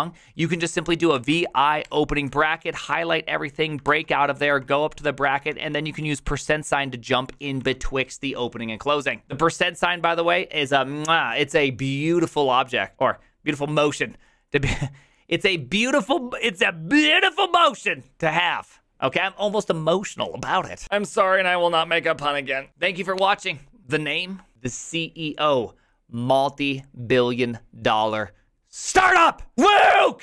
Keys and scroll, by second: 0.9-1.9 typing, 3.9 ctrl+c, 4.1-7.6 typing.